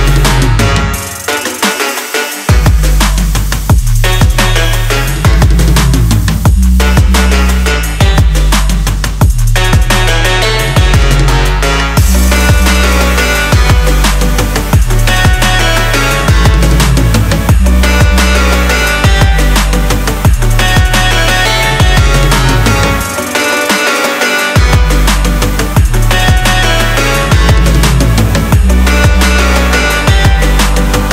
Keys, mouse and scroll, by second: 5.0-22.6 drag, 28.1 click.